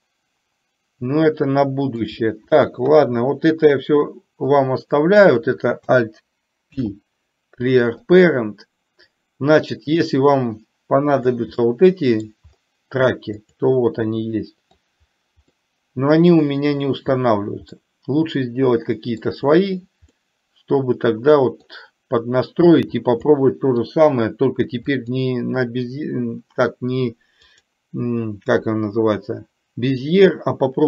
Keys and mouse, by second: 0.0-2.1 middle drag, 4.6-5.1 drag, 6.9 alt+p, 10.3-11.4 drag, 11.6-12.4 middle drag, 13.5-14.9 drag, 17.9-19.4 middle drag, 20.3-21.8 middle drag, 23.4 middle click, 25.0 click, 27.5-30.8 drag.